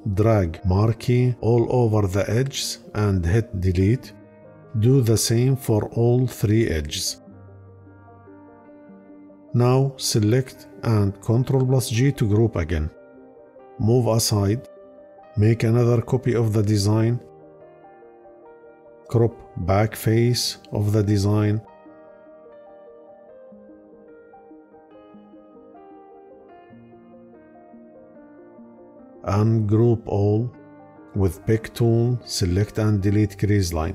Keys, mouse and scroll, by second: 3.1 Delete, 7.5 Delete, 8.3 Delete, 9.1 Delete, 11.0 ctrl+g.